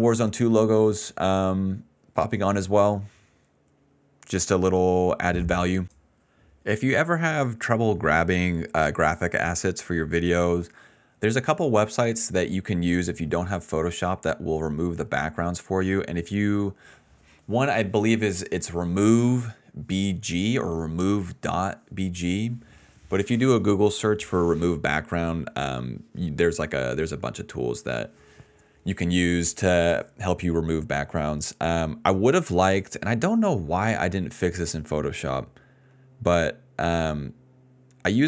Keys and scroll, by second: 0.6-2.0 typing, 14.7 ctrl+c, 15.2 alt+v, 37.3 ctrl+s.